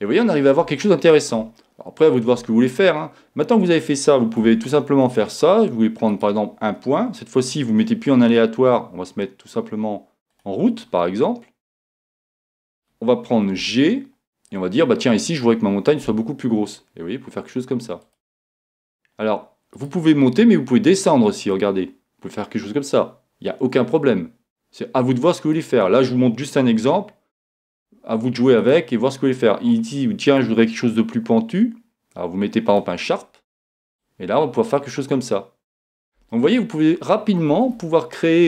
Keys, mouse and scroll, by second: 0.0 click, 4.5 Tab, 6.1-7.9 right drag, 8.3-10.1 drag, 13.6 g, 18.2-19.9 drag, 19.7-21.5 right drag, 21.5-23.2 drag, 27.0-28.6 middle drag, 28.6-30.4 right drag, 30.3-31.9 drag, 34.0-35.8 drag, 36.3-38.2 middle drag.